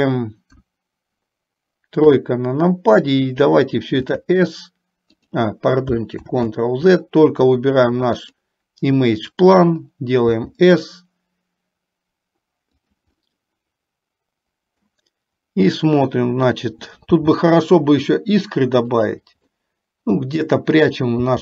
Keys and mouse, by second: 0.6 KP_1, 2.1 KP_3, 4.1 s, 6.6 ctrl+z, 10.3 s, 13.2-15.1 middle drag, 17.2 g, 19.7-21.2 middle drag.